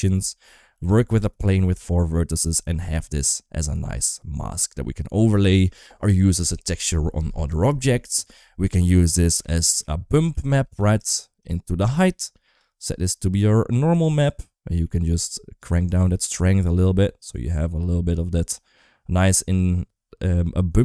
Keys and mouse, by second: 0.6 g, 1.4 Tab, 1.6 1, 2.2 Tab, 2.6 middle click, 2.8 g, 9.2-11.4 drag, 11.8 click, 12.8 click, 13.1 click, 14.6 middle click, 15.5-20.8 drag.